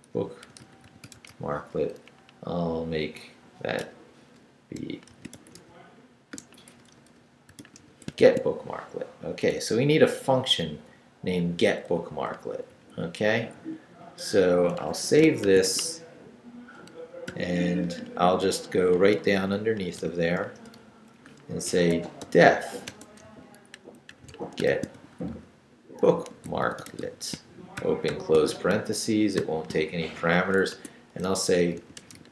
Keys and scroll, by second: 0.0-1.8 typing, 1.9 Left, 3.8-8.7 typing, 9.6 Right, 11.9 Left, 12.7 Right, 14.8 Escape, 15.2-16.2 typing, 17.3 o, 18.9 Down, 20.0 i, 20.4 Return, 21.2 Up, 21.4-28.1 typing, 29.4 shift+;, 30.3 shift+Return, 30.7 Tab, 31.4-32.3 typing.